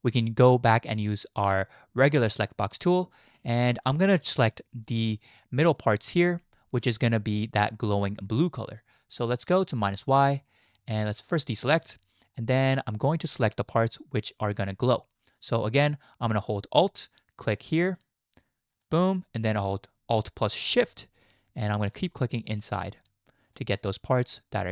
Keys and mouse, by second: 0.0-2.5 drag, 4.0 shift+click, 5.2 click, 9.7 click, 12.4-12.7 shift+drag, 18.8-20.7 alt+drag, 21.8 alt+shift+click.